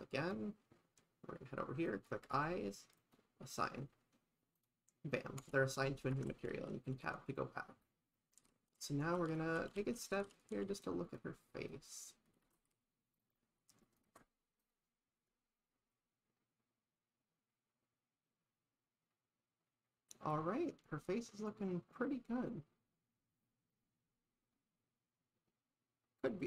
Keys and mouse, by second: 2.0 click, 3.0 click, 4.6 click, 5.4 Tab, 6.2 shift+`, 12.6 shift+`, 14.6 click.